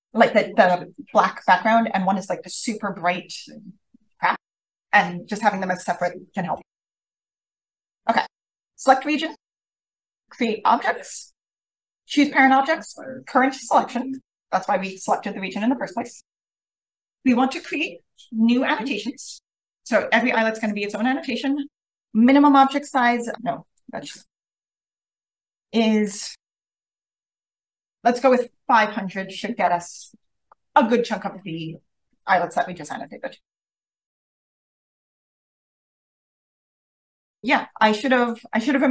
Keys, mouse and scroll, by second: 10.3 click, 18.8 click, 20.7 click, 22.2 5, 22.5 0, 23.7 click, 24.4 5, 24.7 0, 25.6 click, 26.4 5, 26.8 0, 27.5 click, 35.1 click, 37.3-38.9 ctrl+scroll up 2.